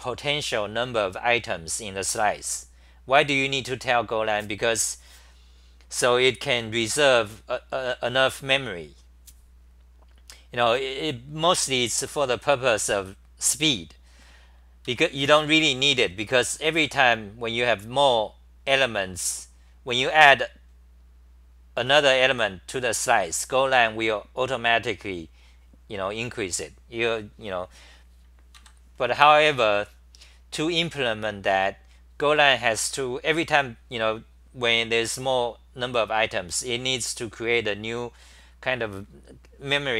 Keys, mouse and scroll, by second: 12.5 1, 14.9 ctrl+g, 15.3-17.3 typing, 28.6 ctrl+g.